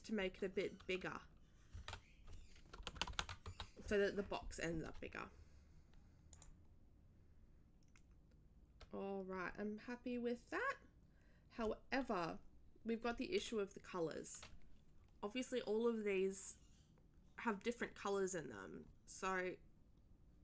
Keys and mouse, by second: 1.7 2, 3.1 1, 6.3 click.